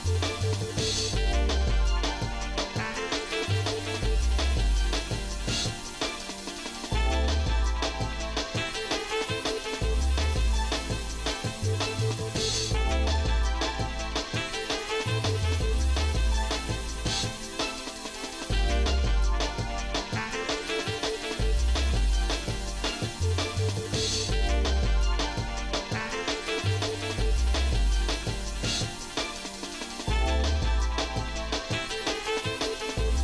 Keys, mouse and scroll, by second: 3.8-7.8 ctrl+shift+right drag, 9.1-13.3 ctrl+shift+right drag, 14.1 middle click, 15.0-18.1 ctrl+shift+right drag, 18.7 ctrl+shift+right click, 20.5 ctrl+z, 21.1-22.7 ctrl+shift+right drag, 23.3-24.9 ctrl+shift+right drag, 25.7-26.9 ctrl+shift+right drag, 27.9-29.2 ctrl+shift+right drag, 29.5 ctrl+z, 30.2-33.2 ctrl+shift+right drag.